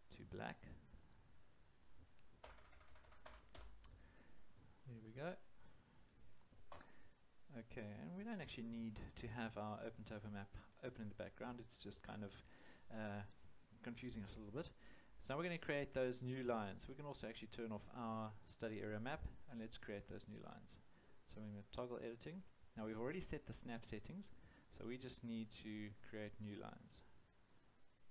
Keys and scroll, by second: 2.4 0, 3.5 Return.